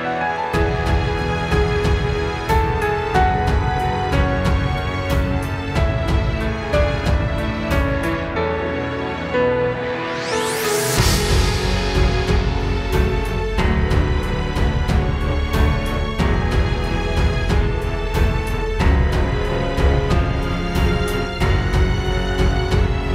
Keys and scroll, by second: 3.1 space, 3.4 space, 4.2 space, 4.5 space, 20.1 space, 21.0 alt+super+space.